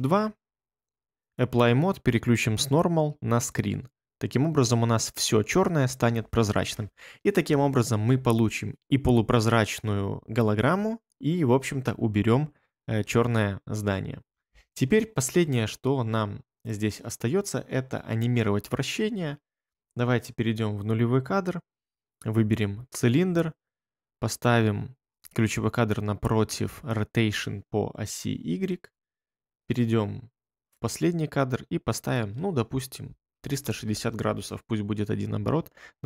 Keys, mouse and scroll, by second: 33.0-34.1 typing, 34.2 Return.